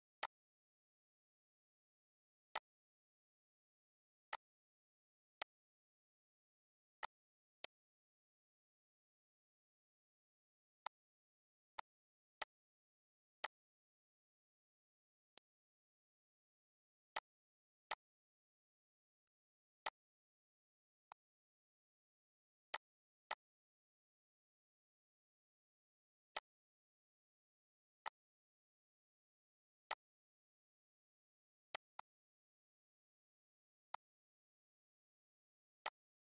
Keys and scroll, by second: 6.3 shift+g.